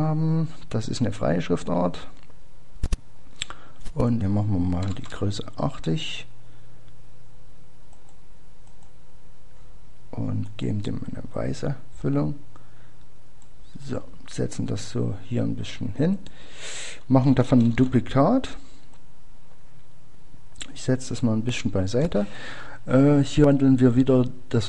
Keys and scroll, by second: 3.9-4.6 typing, 7.3 typing, 23.3 typing.